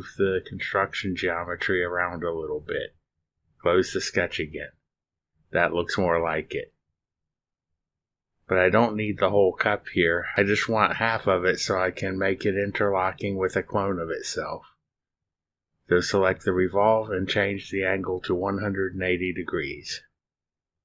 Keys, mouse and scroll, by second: 0.4-0.8 scroll up 1, 1.0-1.4 drag, 2.3-4.3 drag, 5.2 click, 6.5 middle click, 6.9-12.4 drag, 13.4 middle click, 13.6-14.5 drag, 16.4 click, 18.3 click, 19.7-20.8 typing.